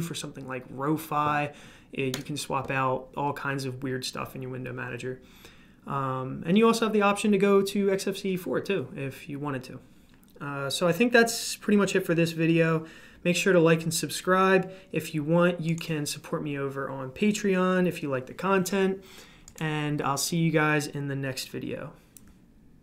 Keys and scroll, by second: 2.1 Escape.